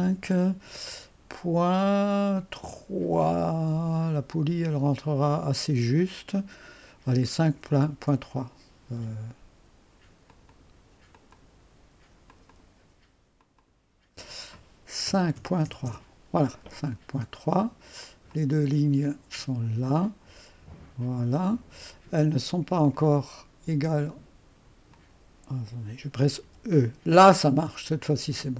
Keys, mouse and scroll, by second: 3.1-3.8 typing, 7.3 typing, 7.9 Return, 10.3-13.2 drag, 13.4 click, 14.8-16.1 typing, 18.0-18.8 typing, 18.3-19.3 drag, 20.0-22.0 drag, 22.2 click, 22.9 click, 24.9 click, 26.4 typing.